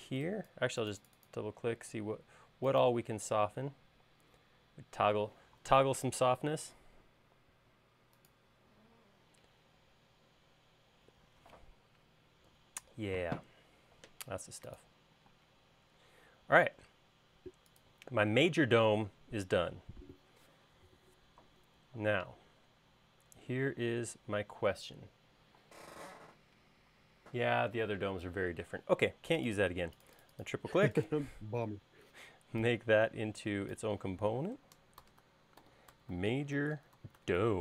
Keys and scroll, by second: 16.2 space, 35.7-37.6 typing.